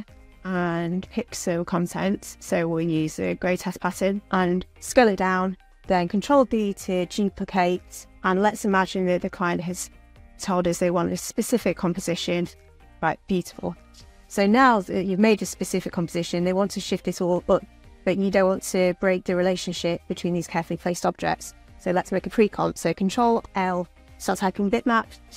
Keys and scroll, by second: 6.2 ctrl+d, 22.7 ctrl+l.